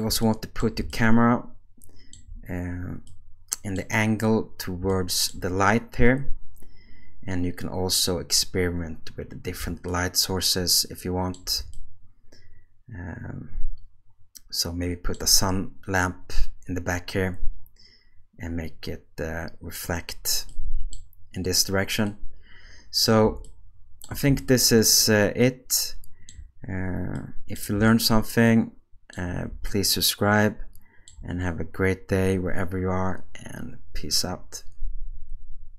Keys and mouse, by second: 0.6 middle click, 3.1 middle click, 20.5-21.0 middle drag, 22.1-23.1 middle drag, 24.5-26.3 shift+middle drag, 27.2 middle click.